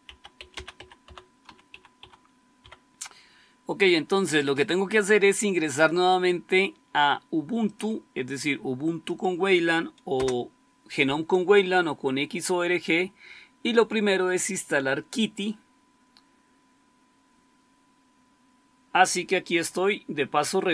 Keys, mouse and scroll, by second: 0.0-2.5 typing, 10.1 Return.